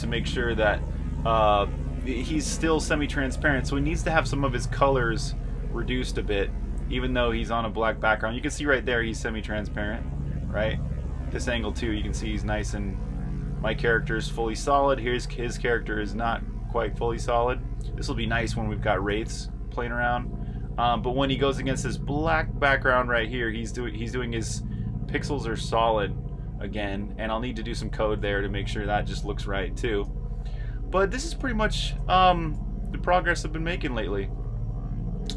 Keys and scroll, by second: 3.7-5.1 typing, 6.7 r, 8.1 typing, 9.8-13.0 typing, 15.3-25.2 typing, 27.9 j, 29.3-35.3 typing.